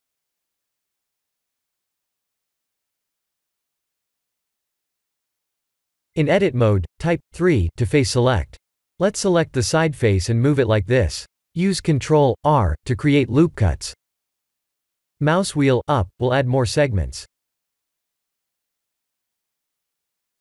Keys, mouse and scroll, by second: 4.4 Tab, 4.8 3, 6.0 click, 7.7 g, 11.9 ctrl+r, 16.7 1, 17.3 click, 17.6 b, 19.0 click.